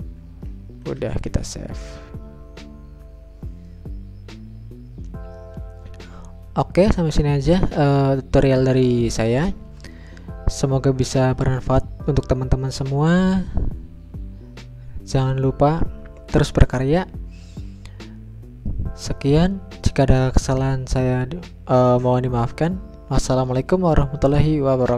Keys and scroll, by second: 2.6 ctrl+s.